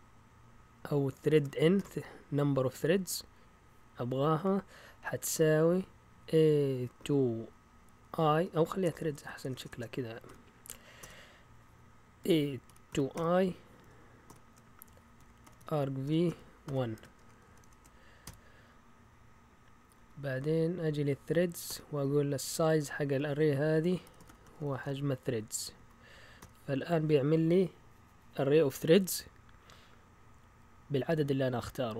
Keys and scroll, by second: 1.3-1.7 typing, 5.3-11.0 typing, 12.2-13.1 typing, 14.3-18.2 typing, 19.9 Down, 21.6 typing, 23.8-26.8 typing, 25.7 Right.